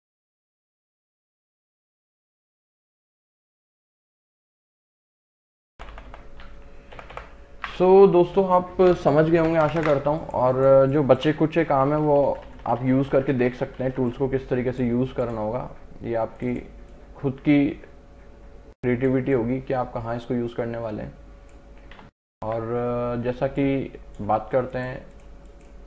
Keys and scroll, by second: 5.6 ctrl+KP_Subtract, 7.0 ctrl+KP_Subtract, 9.5 ctrl+KP_Add, 10.0 space, 11.8 ].